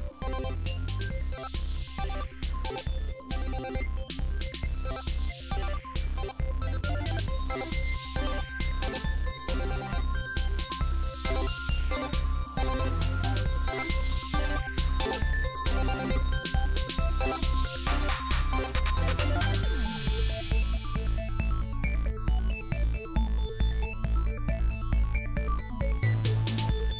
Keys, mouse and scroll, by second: 0.0-4.0 drag, 4.0 a, 5.5 click, 6.3-11.9 typing, 12.9 shift+d, 13.9-14.2 drag, 14.2-16.3 typing, 17.5 click, 18.8-19.2 drag, 21.2 click, 21.9 middle click, 22.1 ctrl+a, 22.8 ctrl+l, 23.2-26.7 drag, 26.7 middle click, 26.8-26.9 drag, 26.8 a.